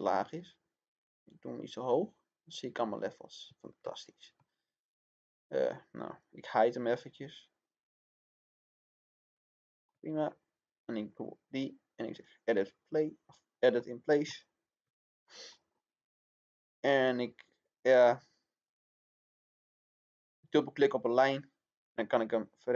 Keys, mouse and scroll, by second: 3.4 Escape, 3.9 middle click, 6.0 click, 6.6 right click, 8.0 click, 9.2 middle click, 10.8 click, 12.6-13.2 scroll up 1, 13.2-15.4 middle drag, 15.4 scroll up 1, 16.8-22.7 drag.